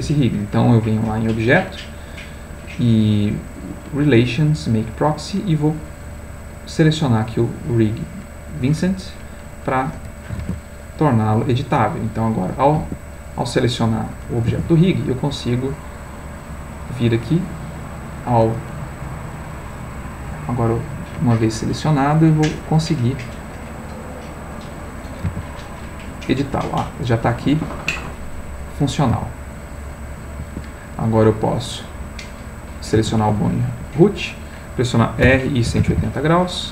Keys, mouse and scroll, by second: 1.2 click, 4.7 click, 7.0 click, 8.9 click, 10.4 ctrl+Tab, 11.7 click, 12.5 click, 12.8 Escape, 13.2 click, 14.5 ctrl+Tab, 15.6 click, 17.2 click, 20.1 click, 21.9 click, 22.6-23.7 middle drag, 24.0 click, 25.3 g, 27.5 Escape, 28.2-29.2 middle drag, 29.2 g, 30.4 Escape, 31.6 click, 32.9 g, 33.8 Escape, 35.2 r, 35.8 8, 35.9 0.